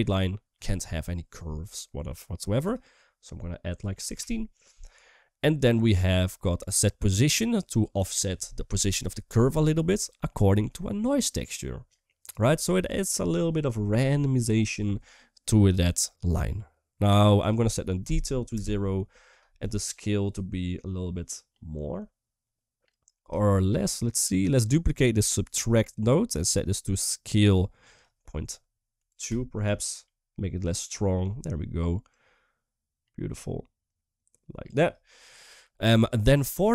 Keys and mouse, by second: 2.4-4.0 drag, 5.2 middle click, 6.1 middle click, 7.2 click, 7.4 typing, 10.0-10.4 middle drag, 11.6 click, 12.1 typing, 16.3 middle click, 17.1-19.4 drag, 19.7-22.7 shift+drag, 23.3 shift+middle click, 23.8 click, 24.1 click, 25.5 shift+d, 26.3-27.3 drag, 27.8-29.1 drag, 30.5 shift+middle click, 31.8-34.4 drag, 35.8 shift+middle click, 36.1 shift+middle click.